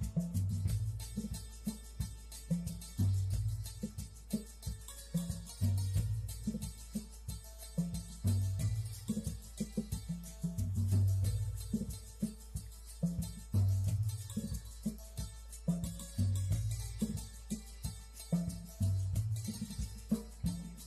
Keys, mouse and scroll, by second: 1.0 shift+middle click, 3.8 v.